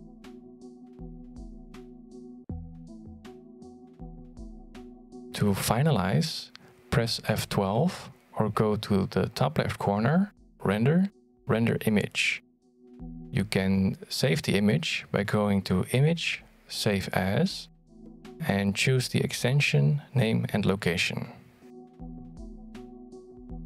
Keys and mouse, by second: 1.0-2.5 drag, 2.6 click, 3.7 click, 4.6 click, 5.8-12.2 shift+drag, 15.0 click, 17.6 F12.